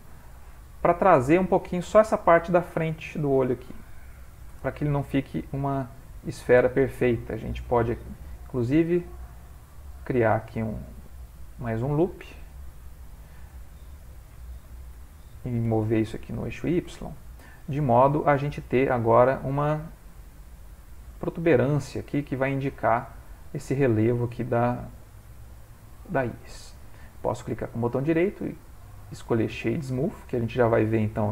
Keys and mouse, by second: 5.4 middle click, 6.5 middle click, 8.1 ctrl+r, 10.1 middle click, 10.9 ctrl+middle click, 12.7 alt+click, 14.6 o, 15.6 g, 17.1 Tab, 17.5 ctrl+middle click, 18.4 middle click, 18.5 middle click, 18.8 middle click, 23.9 middle click, 27.1 right click, 29.1 middle click.